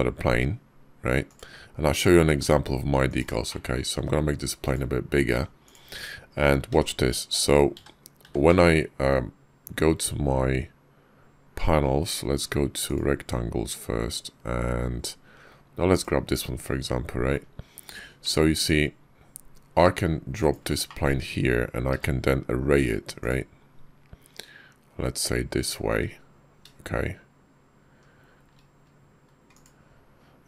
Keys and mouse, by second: 2.1 g, 3.3 shift+click, 3.8 s, 5.1 g, 6.5 d, 7.4 click, 8.0 w, 17.7 g, 20.7 shift+click, 21.7 q.